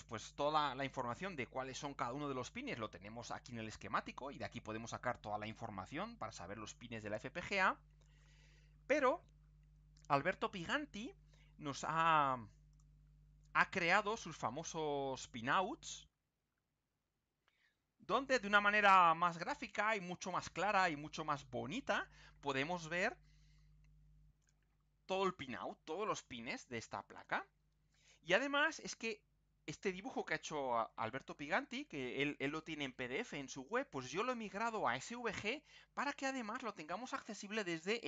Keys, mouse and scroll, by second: 3.5-4.3 scroll up 2, 5.0 scroll down 2, 5.8-6.5 scroll up 4, 6.9 scroll down 2, 11.7 click, 12.7 click, 13.8 click, 16.6 ctrl+scroll up 2, 17.7 ctrl+scroll down 2, 18.7-20.5 drag, 22.1-22.6 scroll down 4, 23.2 scroll up 2, 37.7-38.0 ctrl+scroll up 2.